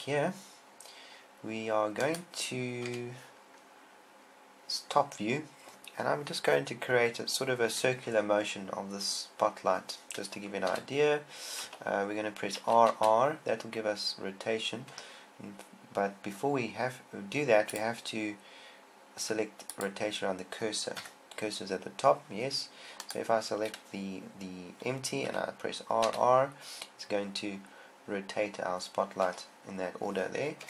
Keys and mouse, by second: 2.4 click, 3.3 KP_7, 3.3 KP_7, 11.3 r, 13.1 r, 21.4 KP_1, 23.4 click, 25.8 r, 25.9 r.